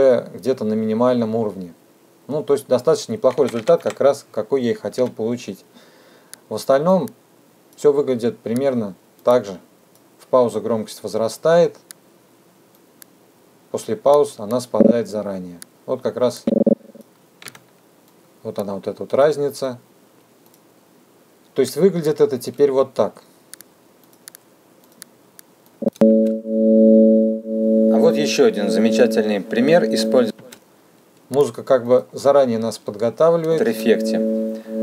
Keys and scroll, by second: 4.3 h, 16.7 t, 25.8 space, 30.2 space.